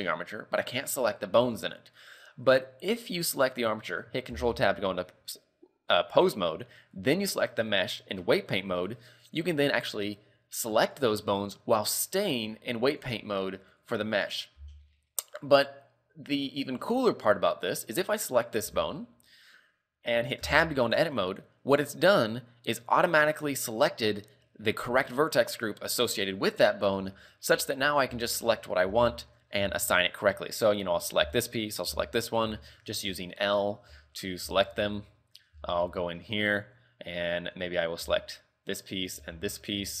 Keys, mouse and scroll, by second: 0.8 right click, 3.2 right click, 4.5 ctrl+Tab, 7.1 right click, 9.7 right click, 11.2 right click, 13.3 right click, 14.2 right click, 19.0 right click, 20.7 Tab, 21.7-22.5 scroll down 7, 22.7-24.0 scroll up 18, 27.7 a, 28.3 shift+middle click, 28.8 scroll up 3, 29.0 z, 29.3 shift+middle click, 29.7 scroll up 3, 29.8 z, 30.2 shift+middle click, 31.4 l, 32.0 l, 32.4-32.8 scroll down 4, 32.8 shift+middle click, 33.4 shift+middle click, 33.7-34.1 scroll up 5, 34.1 shift+middle click, 34.7 shift+middle click, 34.9 z, 35.1 middle click, 35.8 shift+middle click, 36.1-36.5 scroll up 3, 36.5 middle click, 38.2 l, 39.3 l, 39.7-40.0 scroll down 4.